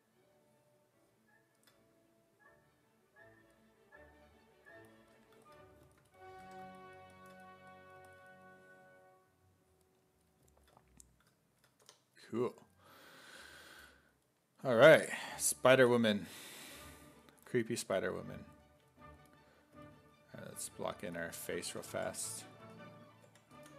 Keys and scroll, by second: 5.2 1, 6.5 1, 11.9 f, 14.8-15.8 typing, 21.1-23.7 typing.